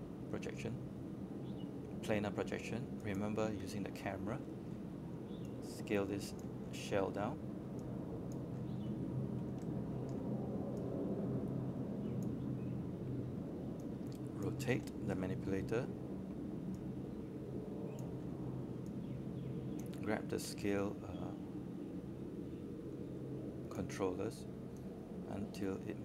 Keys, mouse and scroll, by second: 2.5-7.1 drag, 7.2-8.2 scroll down 1, 11.2 alt+click, 11.9 alt+space, 11.9 click, 12.9-15.2 alt+drag, 15.3 scroll up 1, 15.6 alt+middle click, 16.2 right click, 19.9 right click, 19.9 space, 20.2 click, 22.6 shift+click.